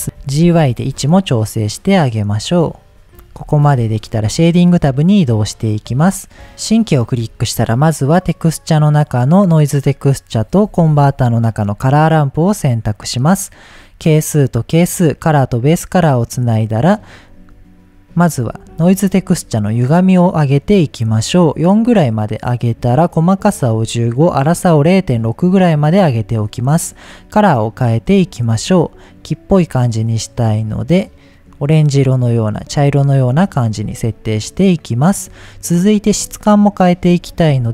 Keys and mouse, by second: 0.1 g, 0.4 y, 2.8 click, 3.0 middle click, 3.4 click, 4.6-7.2 drag, 7.3 shift+a, 10.7 shift+a, 13.4-14.4 drag, 15.1-15.9 drag, 16.3 click, 18.7 middle click, 19.5 middle click, 20.1-22.5 drag, 23.1 click, 24.2-25.9 drag, 27.1 click, 27.7 drag, 32.7 middle click, 33.6 shift+middle click, 36.7 middle click, 37.3 shift+a.